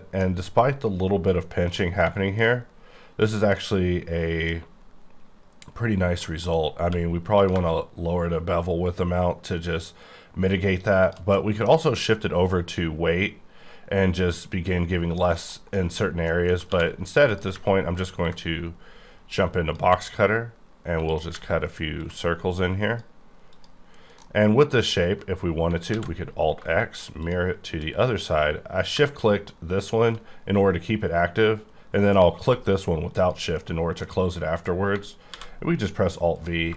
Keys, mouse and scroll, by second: 1.8-2.5 typing, 2.6-3.5 scroll up 2, 3.5 middle click, 5.2-6.2 scroll up 4, 6.2 middle click, 6.8 q, 7.3 click, 11.1 shift+click, 11.3 middle click, 15.3 middle click, 15.4 middle click, 15.7 scroll down 1, 16.3 middle click, 16.7 d, 17.3 click, 23.9-24.2 scroll down 5, 24.2 middle click, 25.4-25.9 scroll down 2, 25.9 alt+x, 27.2 shift+click, 33.1 click, 34.2 middle click, 35.3 alt+v, 36.3 click.